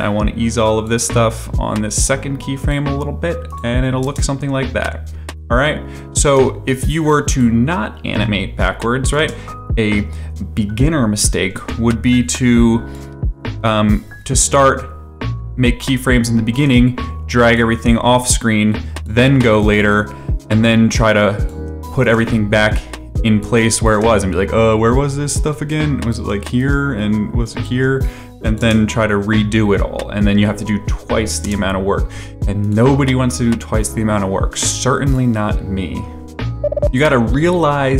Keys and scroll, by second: 4.0 space, 6.2 space, 9.1 space, 11.5 space, 28.6 space, 31.4 space.